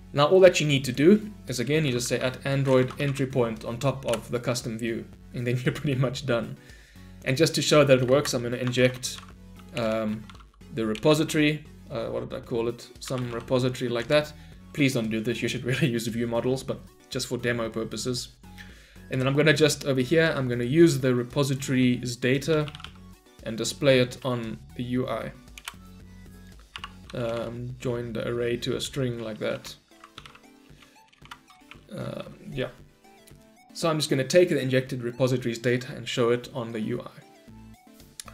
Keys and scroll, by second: 4.1 Return, 9.8 Return, 24.0 Return.